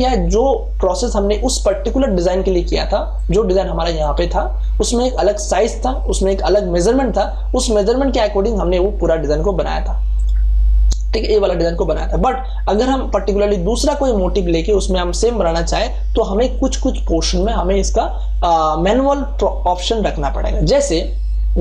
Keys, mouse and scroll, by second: 3.1 click, 6.8 click, 10.1 click, 12.7 click, 16.5-21.6 drag.